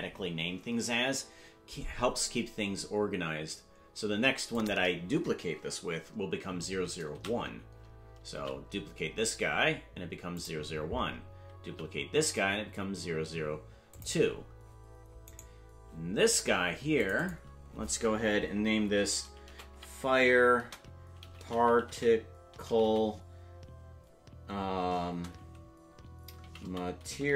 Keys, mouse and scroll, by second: 0.0-2.1 drag, 4.5 click, 7.1 shift+d, 10.0-11.6 drag, 11.8 shift+d, 15.4 right click, 17.0 click, 17.2-27.3 drag.